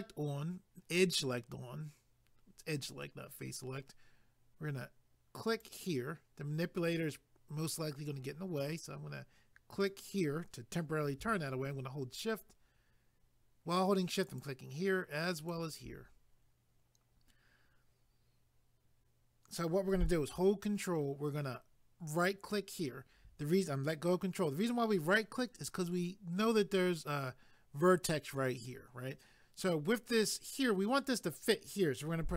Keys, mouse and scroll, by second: 5.5 click, 9.8 click, 14.3 shift+click, 15.4 shift+click, 22.1 ctrl+right click.